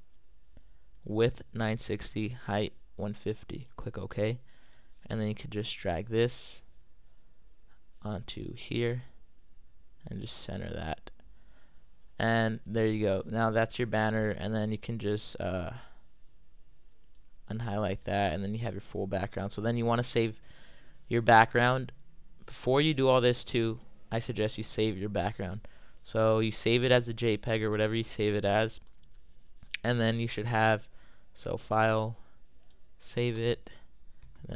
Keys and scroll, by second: 33.9-34.5 typing.